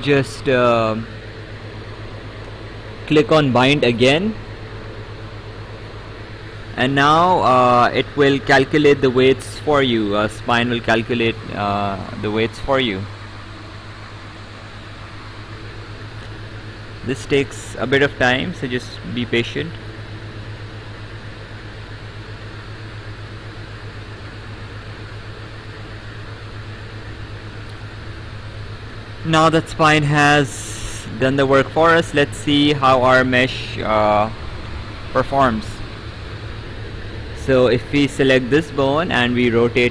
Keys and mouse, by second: 5.8 click, 29.9 right click, 36.8 Escape, 37.6 click.